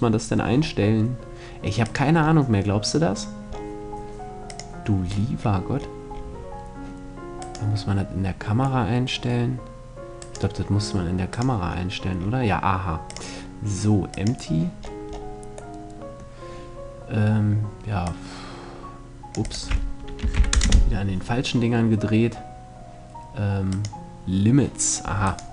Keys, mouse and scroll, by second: 1.3-3.3 drag, 4.0-6.3 drag, 6.9 click, 6.9-8.8 right drag, 9.7-11.5 right drag, 10.8-14.3 drag, 15.2-17.6 middle drag, 17.6-20.7 drag, 23.2-25.2 drag, 24.8-25.5 right drag.